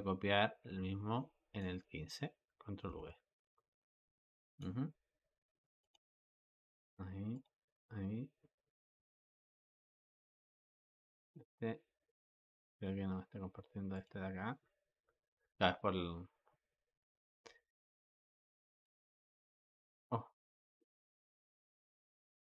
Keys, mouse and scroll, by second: 2.7 ctrl+v, 4.3-5.8 drag, 6.5-13.9 drag, 18.3 click, 18.6 click, 19.1 click, 19.6 click, 22.0-22.5 drag.